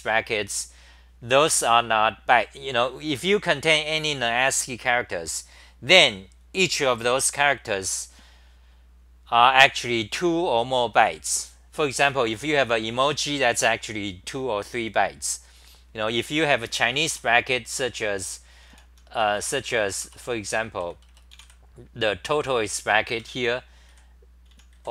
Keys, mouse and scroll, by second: 17.1 4, 18.6 t, 18.7 t, 19.8 Return, 19.8 c, 20.0 Return, 20.8 c, 23.1 super+=, 24.2-24.9 typing.